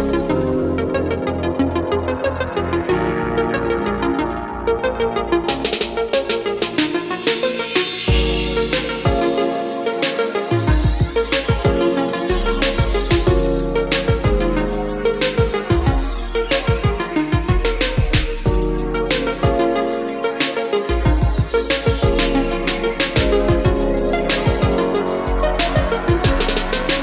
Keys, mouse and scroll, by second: 0.1 space, 1.3 click, 7.3 ctrl+q, 8.6 click, 12.3 KP_5, 14.2-15.3 drag, 17.9 Down, 19.2-20.3 drag, 21.6 Escape, 22.1-23.4 drag, 23.5 Up, 25.4 space, 25.5 click, 26.0-27.0 scroll down 1.